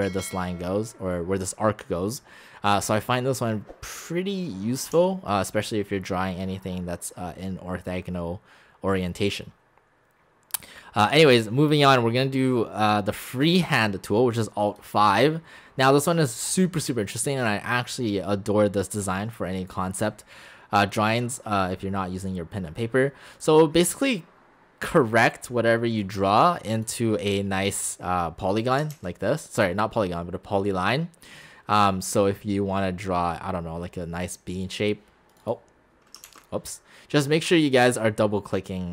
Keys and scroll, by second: 5.0 x, 28.9 ctrl+z, 36.3 ctrl+z.